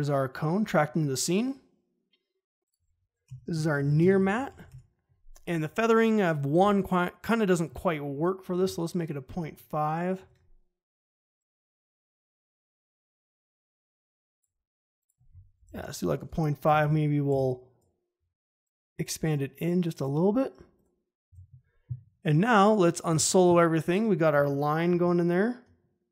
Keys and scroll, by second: 3.2 Return, 3.3-5.0 typing, 6.5 f, 8.5 5, 8.6 Return, 10.1 ctrl+shift+g, 15.6 5, 15.7 Return, 16.6 m, 24.8 ctrl+shift+h.